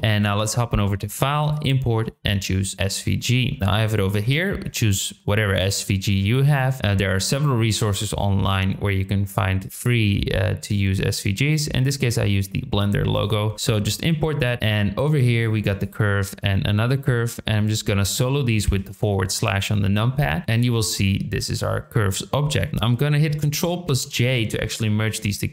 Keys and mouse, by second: 2.7 click, 14.6 click, 15.3 click, 15.8 shift+click, 20.4 middle drag, 23.8 ctrl+j.